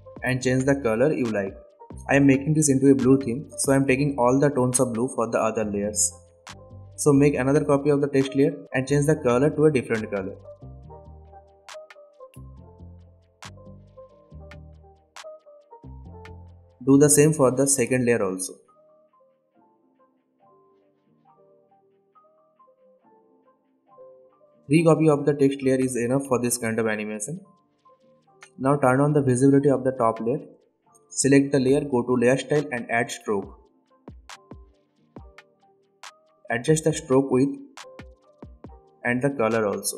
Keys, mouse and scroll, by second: 6.8 ctrl+d, 9.3-13.3 drag, 15.3 ctrl+d, 16.3 ctrl+z, 16.6 click, 17.5 ctrl+d, 18.4-21.1 drag, 32.0-38.7 drag.